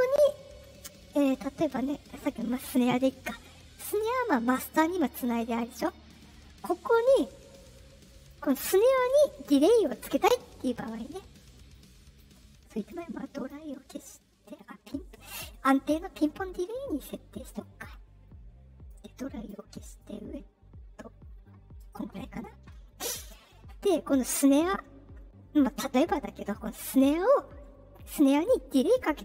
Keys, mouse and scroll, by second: 2.4 click, 5.7 click, 8.1 click, 11.6-12.1 drag, 12.9 click, 15.1 click, 17.2 click, 18.8 click, 19.9-21.7 drag, 24.2 click.